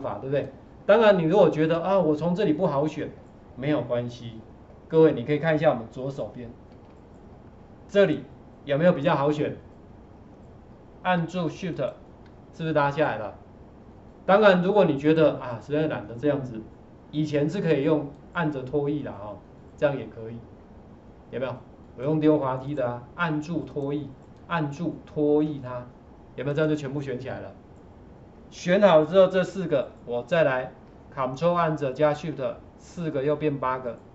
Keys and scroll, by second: 6.7 ctrl+4, 29.4 ctrl+4.